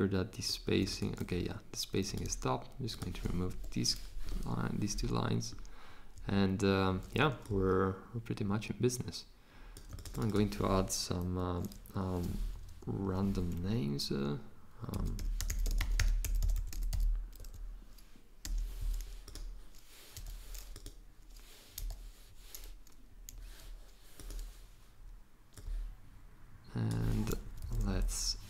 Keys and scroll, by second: 3.5 BackSpace, 14.7-17.4 typing, 18.4 e, 20.2 o, 21.5-22.3 typing, 27.5 Down, 27.6 Down, 27.8 Down.